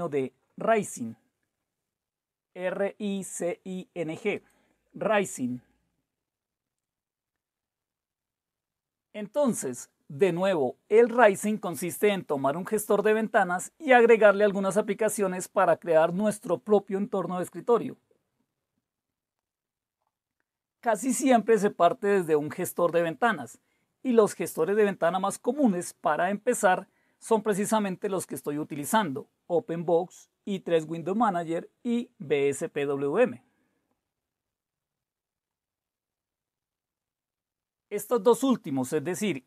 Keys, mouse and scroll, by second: 0.0-0.2 typing.